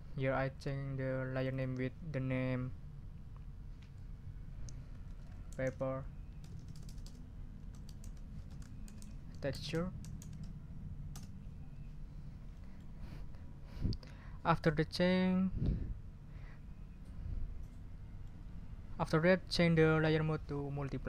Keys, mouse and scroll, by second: 1.4 click, 4.8-10.7 typing, 11.1 Return, 12.5-12.9 scroll up 2, 18.2 click.